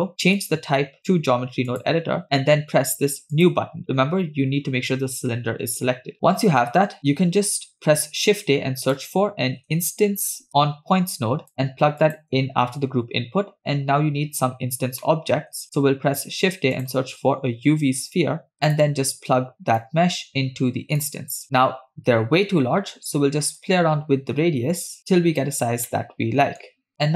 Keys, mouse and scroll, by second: 3.4 click, 6.1 middle click, 6.1-6.5 scroll up 6, 6.7 middle click, 6.9-7.6 scroll up 2, 7.9 shift+a, 15.0 middle click, 15.6 shift+a, 18.5 BackSpace, 19.8 click, 21.0-21.3 drag, 23.7-25.5 shift+drag, 26.0-26.6 middle drag, 26.9 scroll down 2.